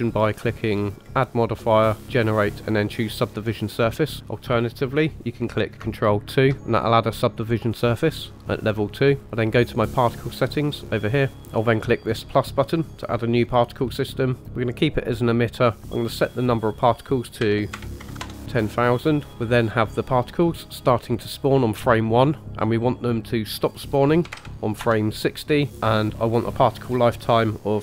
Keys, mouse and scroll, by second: 1.0-4.0 drag, 6.2 ctrl+2, 10.1 click, 11.3 ctrl+z, 13.0 click, 15.9-18.2 drag, 18.0 KP_0, 18.2 KP_0, 22.4-24.8 drag, 26.8-27.8 drag.